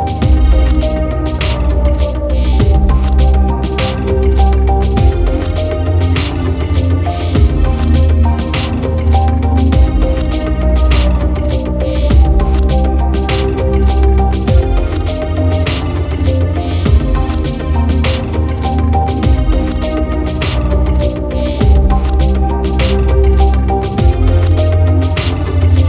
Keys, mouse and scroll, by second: 1.7 click, 2.4 space, 23.8 space.